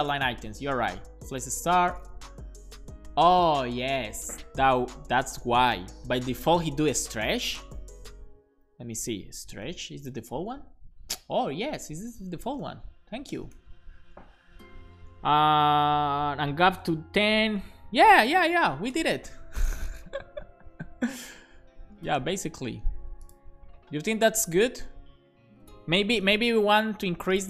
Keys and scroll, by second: 0.3 Return, 1.5 Down, 1.8 Return, 2.1 super+s, 8.3 alt+shift+Left, 9.0-10.6 typing, 12.3-13.4 typing, 14.3 Right.